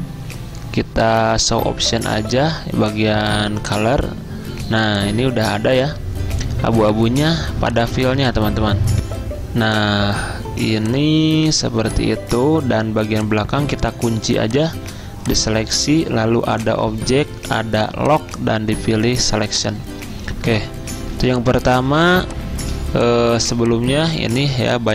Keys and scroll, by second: 9.1 F10, 21.2 z, 23.8 typing.